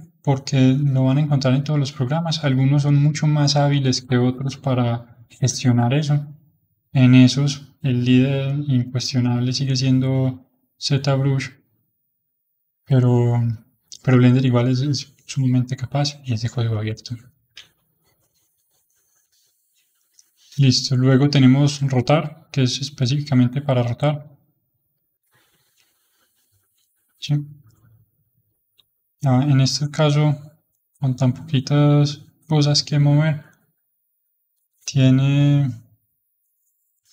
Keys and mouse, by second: 6.1-9.4 middle drag, 9.4-15.0 middle drag, 15.5-20.1 middle drag, 20.1-21.8 drag, 21.8 middle click, 22.7-27.9 drag, 28.5-32.1 drag, 32.1-33.3 middle drag, 33.3-37.1 drag.